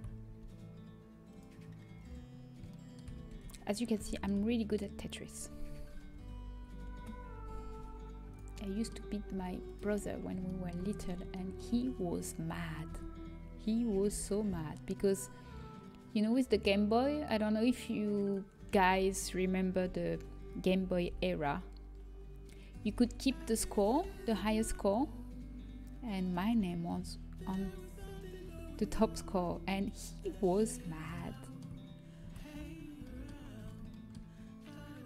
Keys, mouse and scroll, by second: 3.3 a, 6.4 l, 7.0 shift+l, 7.7 g, 12.1 g, 12.9 a, 15.7 l, 15.7 g, 18.9 a, 21.5 l, 21.5 g, 23.0 a, 25.5 a, 26.5 a, 29.4 a, 29.7 g.